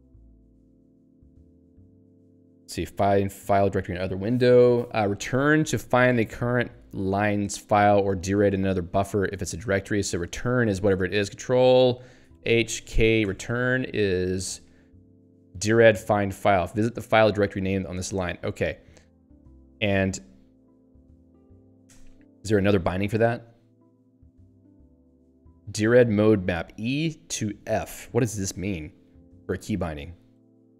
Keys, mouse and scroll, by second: 0.7 scroll, 10.5 q, 11.9 super+e, 14.1 Return, 15.5 click, 16.1 scroll down 2, 18.4 q, 22.8 Return, 23.4 scroll down 1, 24.1 scroll up 1, 30.5 click.